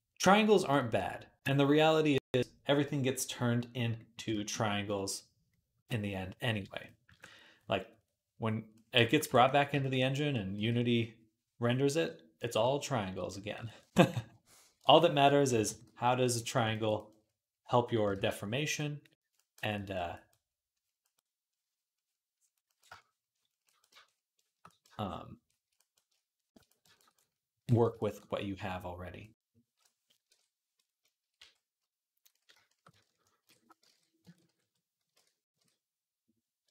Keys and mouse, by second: 5.4-6.7 right drag, 6.9 ctrl+Tab, 8.6 click, 8.8 shift+click, 10.0 click, 10.1-14.7 right drag, 10.4 v, 10.6-14.7 drag, 14.3 d, 15.3 [, 15.4 [, 15.6 [, 16.7-19.0 drag, 17.9 ctrl+z, 24.4-26.9 drag, 24.4-29.3 middle drag, 24.4-26.9 right drag, 30.1 ctrl+Tab, 31.2 q, 33.2 ctrl+j, 33.7 Tab, 34.2 ctrl+t, 34.9 ctrl+z, 35.4 ctrl+Tab, 36.5-36.7 ctrl+drag.